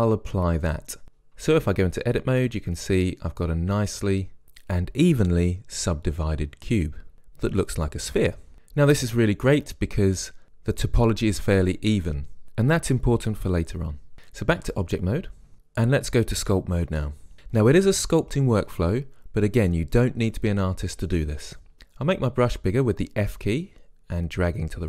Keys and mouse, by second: 1.8 Tab, 14.8 Tab, 22.2 f.